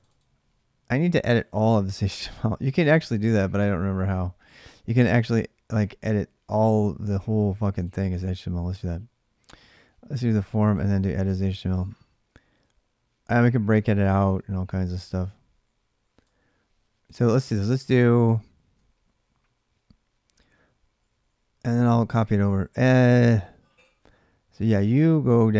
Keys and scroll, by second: 19.1 Down, 19.2 Down, 20.0 Down, 20.2 Down.